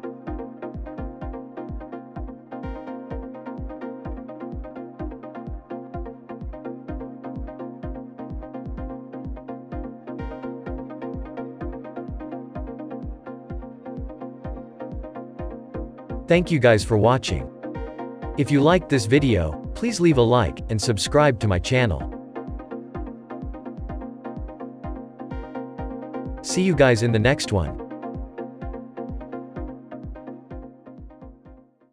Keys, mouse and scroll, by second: 0.2 KP_0, 1.3-1.9 scroll up 4, 2.3-3.3 middle drag, 3.3-4.0 scroll down 1, 4.0 click, 4.7 scroll down 2, 5.3-6.0 scroll up 1, 8.2-8.8 scroll up 7, 10.3-11.2 shift+middle drag, 11.2-11.6 scroll up 5, 11.6-21.5 middle drag, 22.0 middle click, 22.6-22.9 scroll up 1.